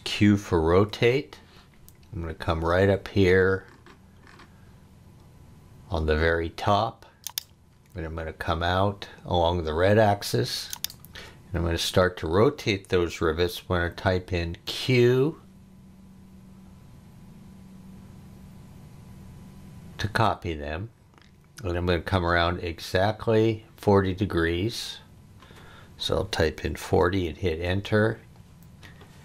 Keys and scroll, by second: 0.7 q, 26.5 4, 26.8 0, 27.6 Return.